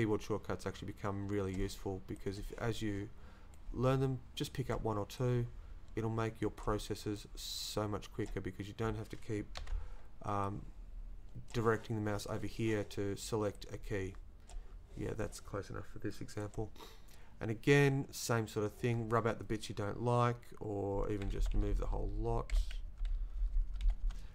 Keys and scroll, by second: 9.6 ctrl+z, 21.4 Left, 22.5 Down, 22.8 Down, 23.4 Left.